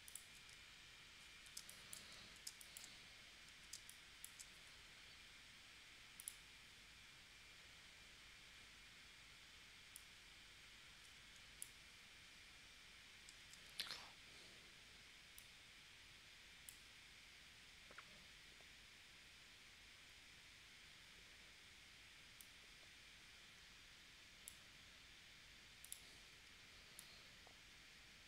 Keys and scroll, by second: 1.6 space, 2.4 space, 3.7 space, 13.4 super+z.